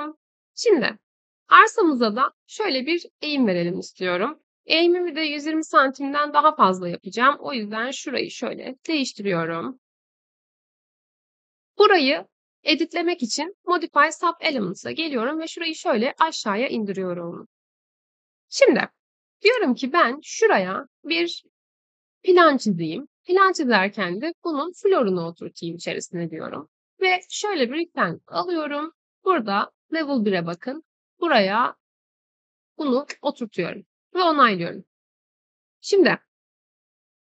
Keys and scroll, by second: 8.7 3, 18.0 Escape.